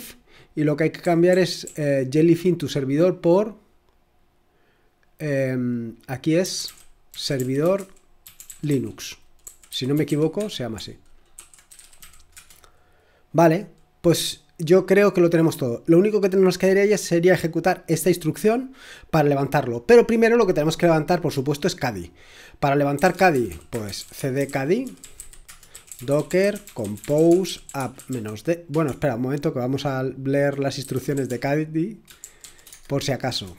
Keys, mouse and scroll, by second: 0.0-3.1 typing, 5.4-12.5 typing, 16.8 click, 17.0 click, 17.3 click, 22.8-33.2 typing, 33.3 Return.